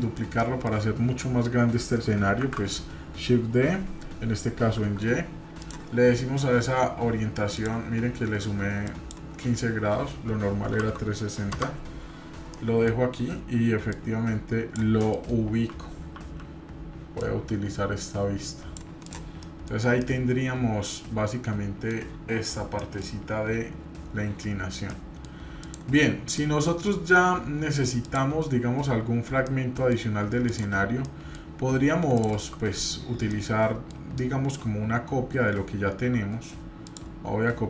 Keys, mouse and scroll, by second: 2.4 shift+d, 7.5-12.0 drag, 12.5 middle click, 13.9 click, 15.0 middle click, 15.4 KP_1, 16.1 KP_3, 17.2-18.8 drag, 19.1 drag, 19.4 middle drag, 19.7 scroll down 1, 20.0-21.9 middle drag, 22.4-22.8 scroll down 1, 22.8 middle click, 24.9-25.2 middle drag, 25.6 click, 26.4 middle click, 28.0 click, 29.4-29.9 middle drag, 30.4 click, 31.0 middle click, 32.2 click, 33.3-33.9 middle drag, 36.9-37.6 shift+drag.